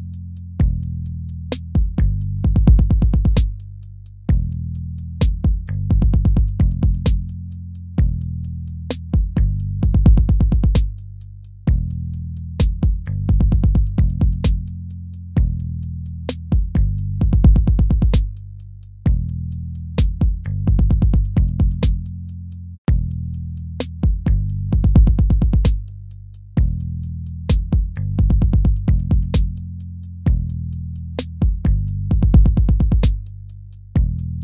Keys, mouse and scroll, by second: 4.9 ctrl+-, 22.4 ctrl+-, 23.7 ctrl++, 25.2 ctrl+-, 25.5 ctrl++.